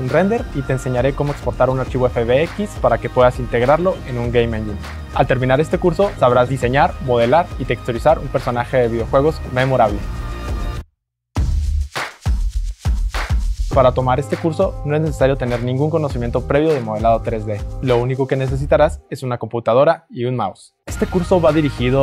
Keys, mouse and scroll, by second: 1.0-5.0 right drag.